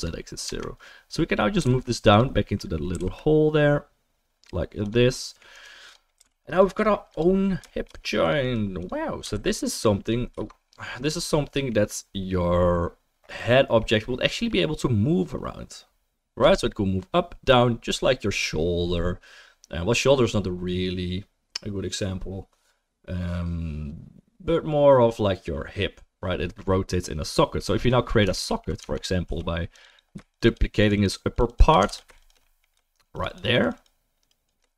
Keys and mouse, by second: 0.4 Tab, 1.6 g, 2.9 g, 5.5-7.9 right drag, 6.2 g, 7.9-9.6 drag, 8.2 right click, 9.4 ctrl+s, 10.3 ctrl+s, 10.3-23.4 right drag, 11.1 click, 11.1 middle click, 23.4-28.3 middle drag, 28.3 alt+right click, 28.5 alt+click, 28.6-34.5 alt+right drag, 28.8 Tab, 29.3 3, 29.7 click, 29.9 click, 30.5 shift+click, 30.9 shift+click, 31.5 shift+click, 31.9 ctrl+z, 32.2 shift+click, 32.4-34.5 middle drag, 33.1 shift+click, 33.3 shift+click, 33.6 shift+click, 34.3 shift+click.